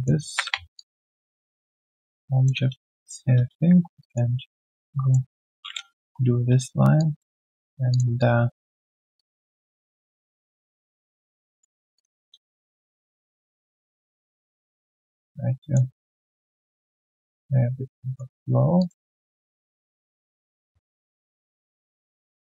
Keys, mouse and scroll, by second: 0.7 ctrl+shift+click, 5.9 ctrl+s, 6.8 Return, 6.9 alt+click, 7.3 alt+q, 7.4 right click, 8.1 alt+click, 8.8 alt+middle click, 9.1 alt+click, 10.6 right click, 12.9 ctrl+shift+click, 17.2 ctrl+shift+click, 19.4 ctrl+shift+click.